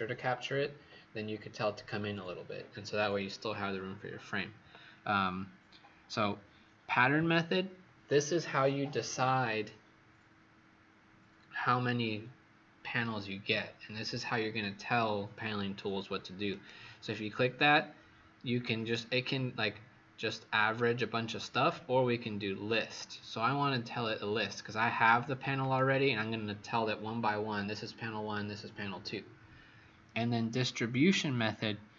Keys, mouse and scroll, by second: 16.5 click.